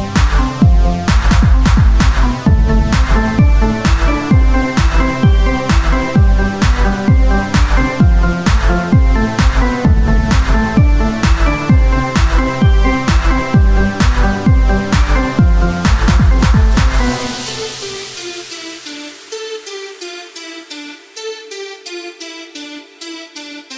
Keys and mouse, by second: 0.7-6.2 drag, 2.1 right click, 6.2 ctrl+r, 8.7-10.3 right drag, 10.3 click, 10.9 Tab, 14.5-17.3 right drag, 15.8-17.3 drag, 17.6-20.7 right drag, 18.8-23.4 drag, 20.9-22.4 right drag, 22.4 Tab, 23.4 KP_1.